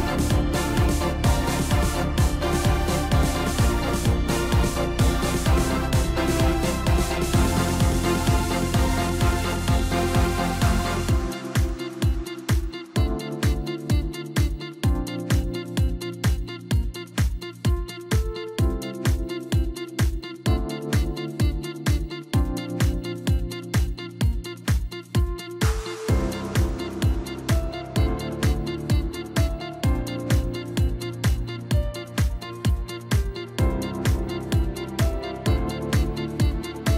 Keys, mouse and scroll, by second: 0.0 2, 0.5 click, 0.7 click, 2.2 KP_3, 3.8 click, 4.7 e, 7.6 KP_1, 9.1 click, 10.3 s, 12.5 scroll up 2, 12.8-13.7 scroll down 2, 13.7-16.8 drag, 17.4 scroll up 1, 17.9-19.2 scroll down 2, 19.2 click, 20.2 click, 20.9 shift+click, 21.9-23.2 middle drag, 23.2 click, 24.0 g, 28.8 Tab, 29.6 KP_1, 30.2-30.6 scroll up 2, 30.9 Tab, 32.7 2, 33.5 click, 34.5 click, 34.7 click, 35.7 shift+click, 35.9 shift+click, 36.8 shift+click.